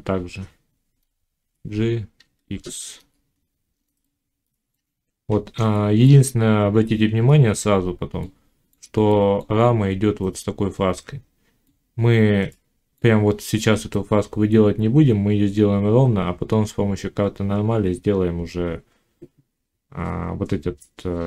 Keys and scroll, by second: 1.2 g.